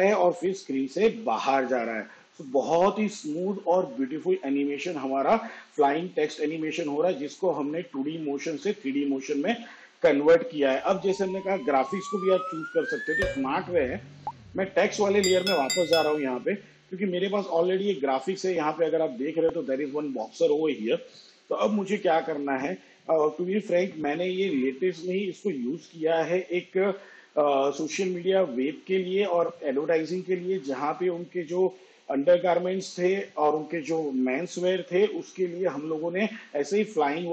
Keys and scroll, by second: 9.0 space.